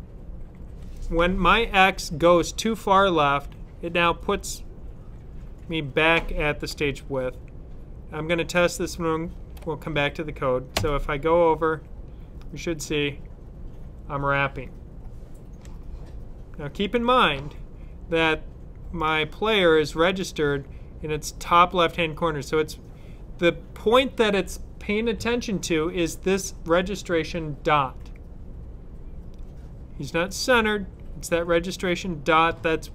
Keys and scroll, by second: 10.6-13.1 Left.